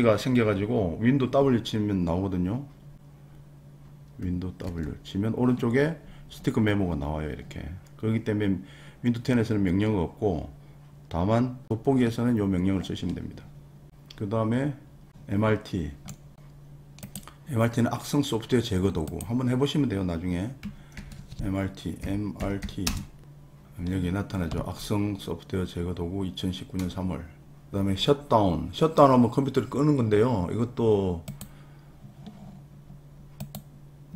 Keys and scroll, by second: 4.6 super+w, 20.9 super+r, 21.7-23.1 typing.